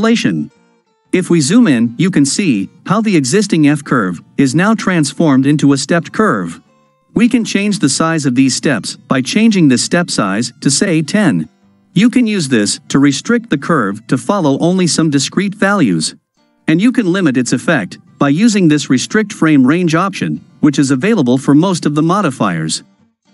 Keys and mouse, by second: 0.7-1.9 ctrl+middle drag, 2.2 shift+middle click, 3.3 ctrl+middle click, 9.3 click, 12.9-15.3 ctrl+middle drag.